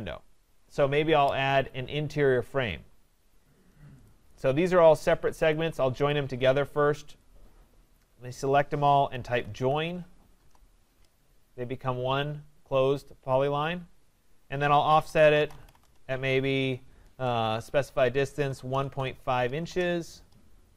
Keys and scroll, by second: 5.3 Escape, 15.8 Return.